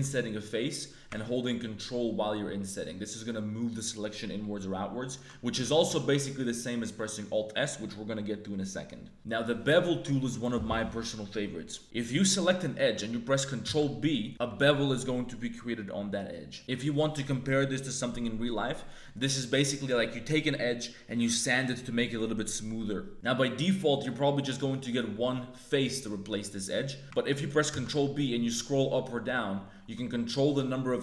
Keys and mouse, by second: 5.8 alt+s, 12.1 click, 13.6 ctrl+b, 16.6 ctrl+z, 16.6 ctrl+b, 27.0 ctrl+z, 27.7 ctrl+b.